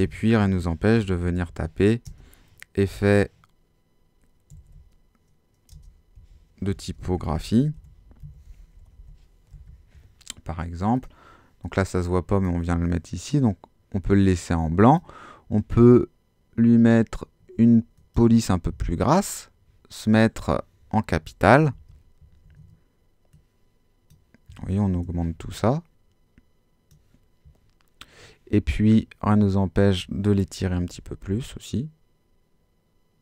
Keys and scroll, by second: 0.4-2.0 typing, 4.3-9.5 typing, 21.6 super+t, 22.4 shift+super+t, 24.9 shift+Return, 30.6 super+t.